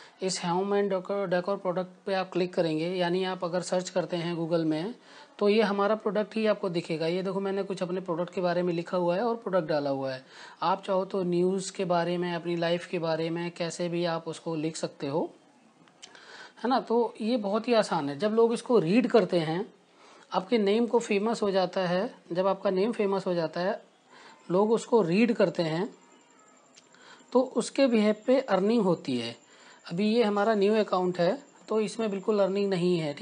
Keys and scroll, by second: 19.2 Return, 23.9-25.6 typing, 27.8 BackSpace, 28.9-30.1 typing, 30.9 Down, 31.7 Return.